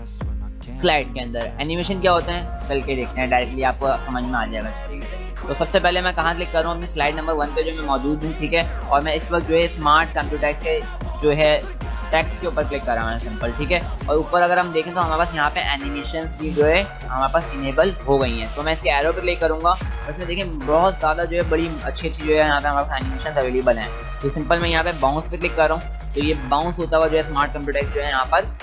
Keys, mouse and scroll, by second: 10.1 click, 18.9 click, 25.4 click.